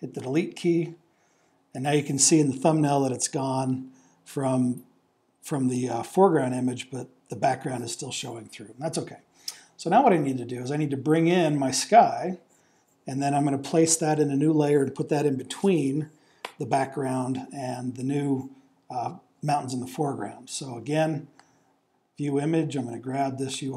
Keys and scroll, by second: 0.2 BackSpace.